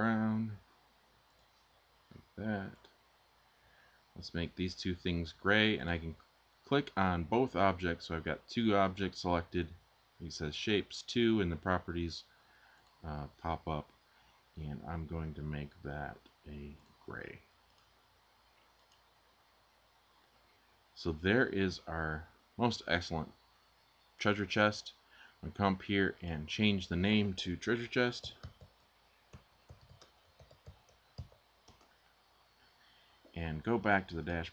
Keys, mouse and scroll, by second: 27.8-31.2 typing, 31.4 Return.